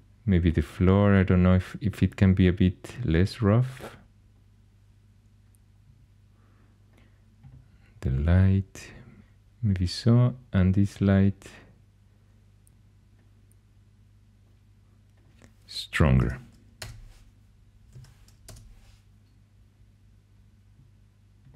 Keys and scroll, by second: 15.8-18.3 typing, 16.8 Return, 18.4 Return.